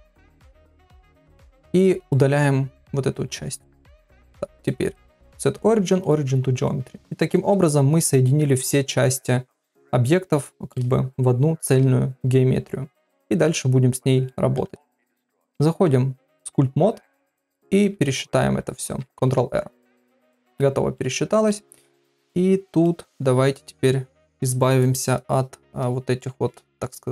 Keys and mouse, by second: 1.9 x, 2.8 middle click, 3.6 right click, 4.6 click, 4.9-6.1 right drag, 6.6 middle click, 8.0 middle click, 10.5 middle click, 13.4 middle click, 15.3 ctrl+Tab, 19.5 ctrl+r, 20.9 middle click, 22.0 middle click, 26.5 middle click.